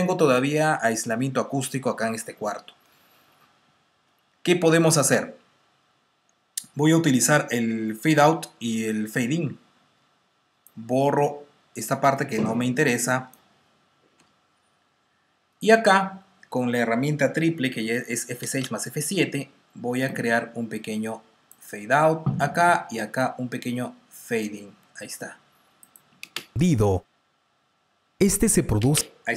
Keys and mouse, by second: 10.5 click, 14.1 Delete, 18.0 F6, 18.4 F7, 20.0 click, 23.1 click, 26.1 click, 26.1 space, 28.7 space.